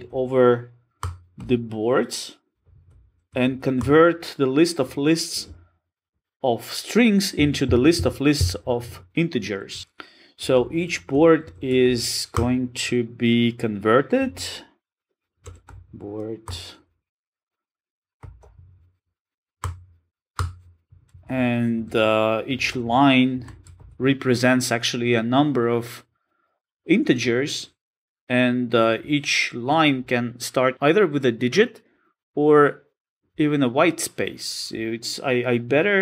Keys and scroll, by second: 1.0 Return, 17.4 Return.